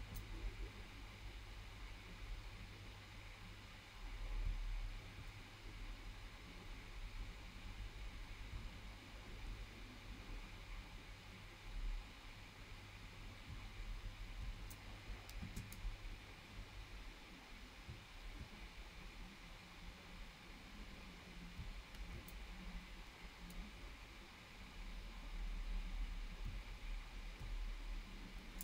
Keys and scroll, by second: 15.4 space.